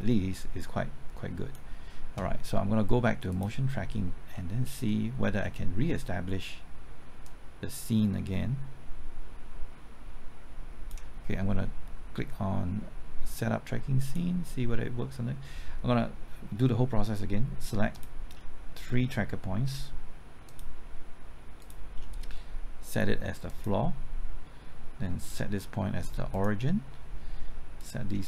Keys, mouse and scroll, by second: 4.3 scroll down 1, 5.8-7.2 scroll up 1, 7.2-11.7 drag, 16.0-16.8 scroll up 1, 16.8-17.9 scroll down 1, 17.9 click, 20.4 shift+click, 21.5 shift+click, 23.4 click.